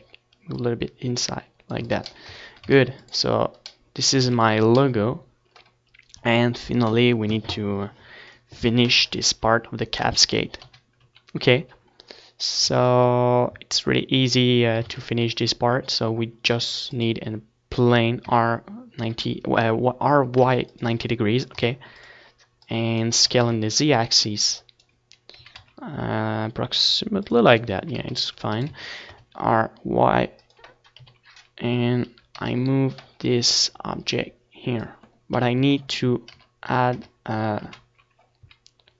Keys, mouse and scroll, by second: 0.6-2.0 drag, 1.0 middle click, 2.0 ctrl+s, 2.0 middle click, 2.4 a, 2.8 ctrl+s, 4.3 ctrl+s, 10.1 ctrl+s, 10.5 KP_1, 11.0 ctrl+KP_3, 12.5 ctrl+s, 14.5 shift+a, 18.3 r, 20.9-23.9 drag, 21.6 s, 23.1 s, 23.9-25.2 middle drag, 25.2 click, 25.2 s, 27.0-28.7 drag, 27.6 s, 28.3-29.8 right drag, 28.3 s, 30.2-31.3 drag, 30.6 KP_7, 31.0 z, 31.3-33.5 middle drag, 31.9 KP_Decimal, 33.5-35.0 drag, 34.6 KP_1, 35.0 Tab, 35.5 KP_Decimal, 36.1 KP_Enter, 37.1 ctrl+KP_3, 37.7 middle click, 37.9 z, 38.6 z, 38.8 z.